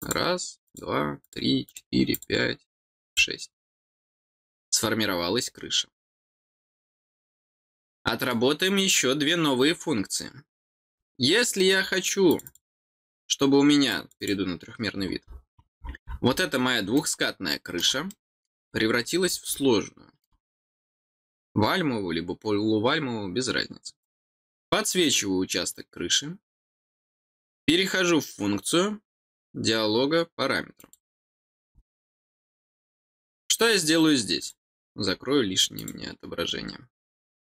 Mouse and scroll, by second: 0.6 click, 1.2 click, 1.6 click, 2.1 click, 3.0 click, 7.8 middle click, 12.2 click, 13.8 click, 14.1 click, 15.2-16.3 scroll down 6, 16.9 middle click, 18.0 middle click, 18.6 scroll down 2, 19.2 middle click, 20.1 middle click, 24.0 click, 30.7 click, 34.3 click, 35.1 middle click, 35.7 click, 37.4 click.